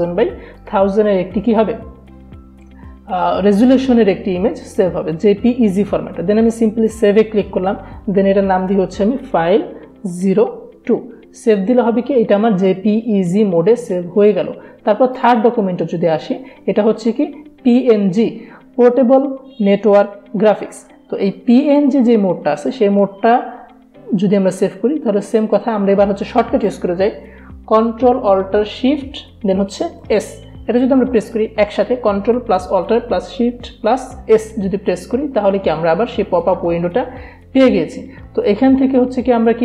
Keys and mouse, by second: 6.9 click, 8.7-10.1 typing, 15.2 click, 26.7 click, 29.9 ctrl+alt+shift+s.